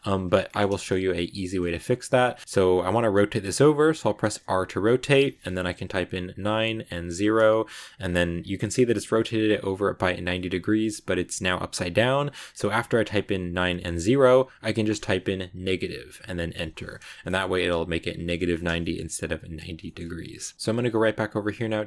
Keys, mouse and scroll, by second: 0.6-3.5 shift+middle drag, 3.5 r, 17.1-20.2 middle drag, 20.2-20.5 scroll up 1, 20.5 g.